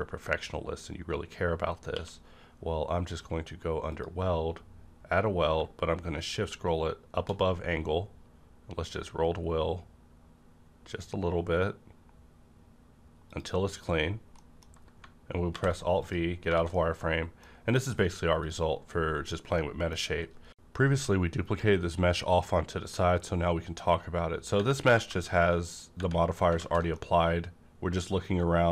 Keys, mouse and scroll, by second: 1.9-3.4 scroll up 1, 1.9 q, 3.9 click, 6.2-6.8 shift+scroll up 2, 6.8-7.4 shift+scroll up 1, 7.4-9.7 scroll up 2, 10.8-11.9 scroll up 1, 12.0-13.3 scroll down 1, 13.3 click, 13.3 click, 13.9 scroll down 1, 14.4 middle click, 15.5 alt+v, 15.9 click, 16.0 click, 16.3 scroll down 1, 16.5 a, 16.7-18.4 middle drag, 16.8 a, 17.5-18.4 scroll down 1, 18.4 click, 19.6 middle click, 26.0-26.4 scroll up 1, 26.5 alt+z, 26.9 middle click, 27.0 alt+z, 27.0-28.7 middle drag.